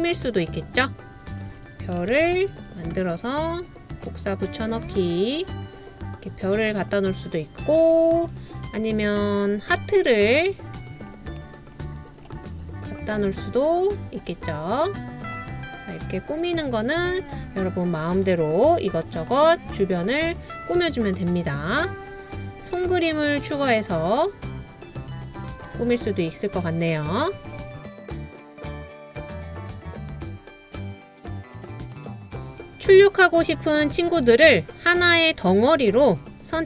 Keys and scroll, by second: 2.2 super+z, 2.3 super+z.